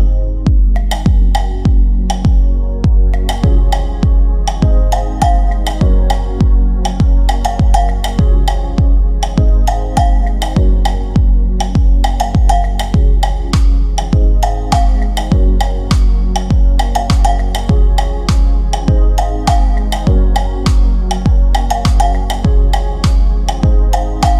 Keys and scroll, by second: 22.2 shift+Page_Down.